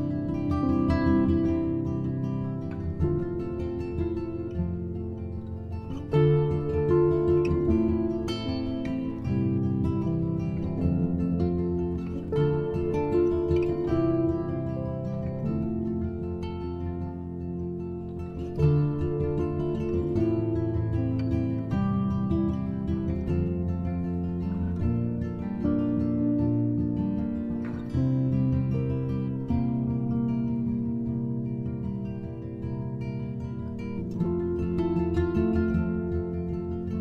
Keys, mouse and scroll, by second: 0.5 shift+a, 9.0 shift+a, 12.9 click, 13.9 click, 15.2 click, 16.3-21.6 drag, 23.3 middle click, 24.2-25.7 drag, 25.7 KP_0, 28.8-32.5 drag.